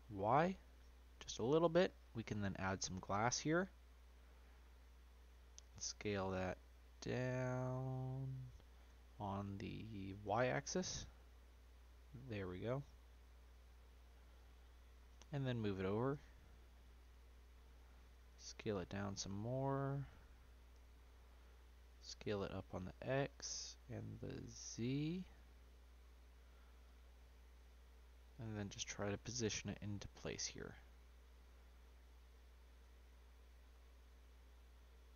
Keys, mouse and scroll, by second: 2.8-4.4 drag, 4.4 scroll down 1, 4.7 middle click, 5.0-5.6 scroll down 1, 5.6 s, 8.8 s, 15.1 g, 18.1 s, 20.1-20.6 middle drag, 20.6-21.0 scroll down 1, 21.0-22.0 middle drag, 22.0 s, 24.1 s, 27.1 middle drag, 27.4 scroll down 2, 27.6-29.0 middle drag, 29.0 g, 32.8 s.